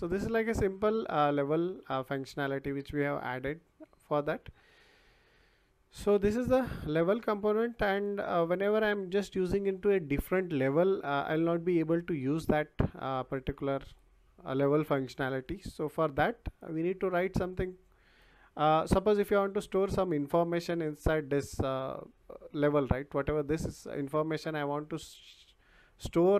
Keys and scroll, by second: 3.8 Escape.